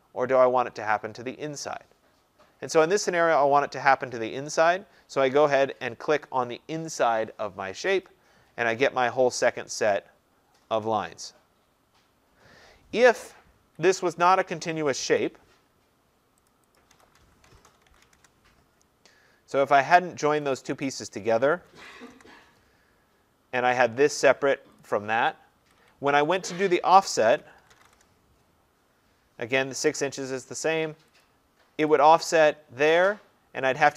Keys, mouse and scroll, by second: 2.6 middle click, 2.8-7.1 scroll, 8.1 click, 13.7 Escape, 14.4 click, 15.2 Delete, 16.5 click, 16.7-18.6 typing, 16.8 click, 20.0-20.6 scroll, 20.6 click, 20.6-22.5 typing, 21.1 click, 22.2-23.1 scroll, 24.1 click, 24.9 click, 25.4-28.4 typing, 26.3 middle click, 26.4 scroll, 26.5 middle click, 29.9 Return, 31.3 click, 32.0 click, 32.4-33.2 scroll, 33.2-33.8 scroll.